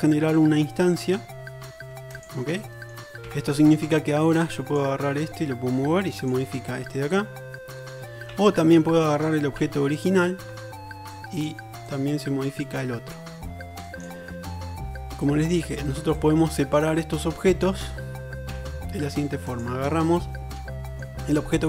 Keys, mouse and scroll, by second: 3.4 Tab, 4.7 right click, 8.4 ctrl+z, 9.7 Tab, 10.1-12.8 drag, 10.5 Tab, 14.2-15.5 middle drag, 18.6 Tab, 19.7 shift+drag, 19.9-21.6 shift+middle drag.